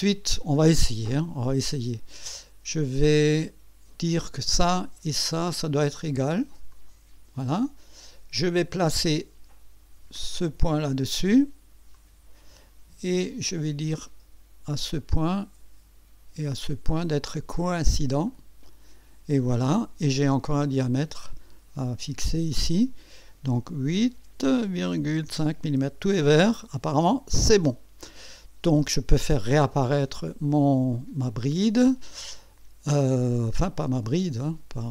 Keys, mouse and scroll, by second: 4.3 click, 5.7 click, 6.7 click, 8.4 click, 10.2 click, 11.9 click, 15.0 click, 16.7 click, 18.3 click, 20.8 click, 22.2 click, 24.2 KP_8, 24.7 KP_Decimal, 25.0 KP_5, 25.3 KP_Enter, 27.1 click, 31.9 click.